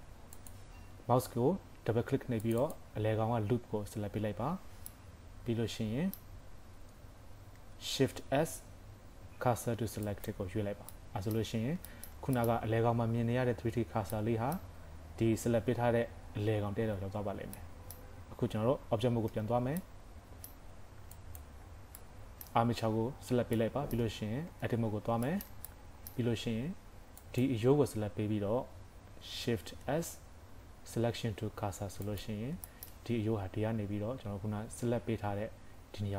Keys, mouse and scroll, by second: 1.4 scroll up 2, 2.5 click, 4.7 scroll down 3, 5.0 middle click, 8.0 shift+s, 10.6-11.3 scroll down 3, 11.0 middle click, 11.6 scroll up 3, 11.9 shift+middle click, 12.3-13.0 scroll up 1, 13.0 middle click, 14.2 middle click, 17.6 middle click, 19.3 Tab, 19.9 middle click, 21.2 click, 21.6 scroll down 3, 22.0 middle click, 22.8 scroll up 1, 23.6 middle click, 24.5 Tab, 25.0 scroll up 2, 25.3 shift+middle click, 25.7 middle click, 26.2 scroll down 4, 27.2 click, 27.9 scroll up 2, 29.7 shift+s, 32.7 shift+middle click.